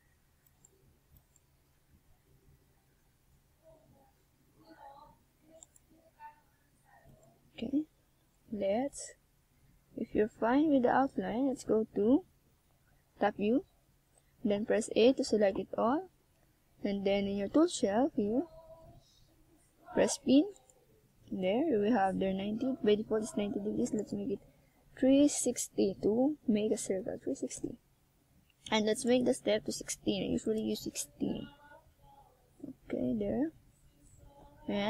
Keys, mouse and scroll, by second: 0.3 ctrl+z, 1.2 middle click, 4.3 KP_1, 5.3-6.8 scroll up 6, 6.4 right click, 9.1 Tab, 9.6 Tab, 10.0 click, 13.8 right click, 14.3 middle click, 15.1 middle click, 17.6 right click, 18.0 scroll up 1, 18.9 right click, 19.9 click, 21.8 right click, 22.5 click, 26.1 middle click, 27.7 KP_1, 29.3 click, 31.2 click, 33.4 middle click.